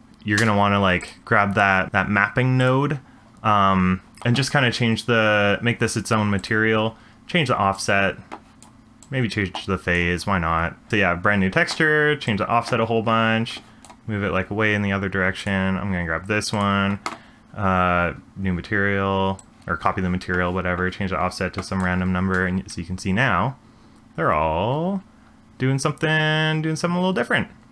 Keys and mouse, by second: 0.4 space, 1.0 click, 1.8 middle click, 2.6 click, 6.5 click, 7.7 click, 9.1 click, 12.2-13.8 drag, 15.4 click, 16.5 click, 19.3-21.8 drag, 22.3 space.